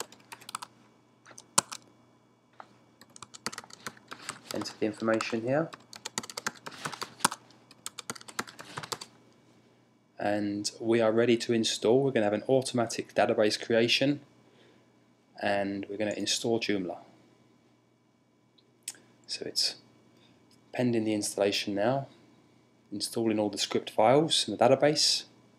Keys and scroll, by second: 0.0-0.8 typing, 1.4 Tab.